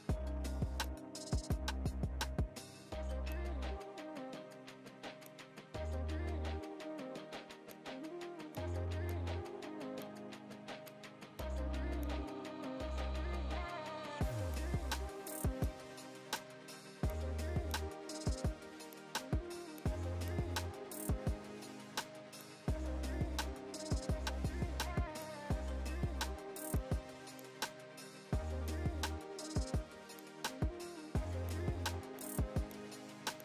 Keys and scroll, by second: 23.2 ctrl+j.